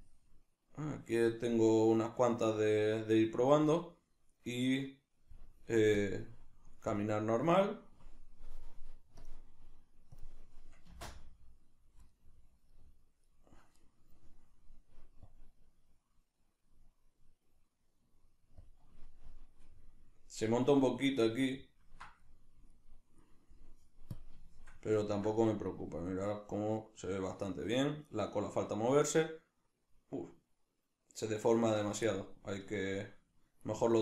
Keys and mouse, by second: 10.9 space, 12.2-15.3 middle drag, 15.3-19.8 drag, 19.8-24.2 middle drag, 24.2 drag, 24.6-34.0 shift+middle drag.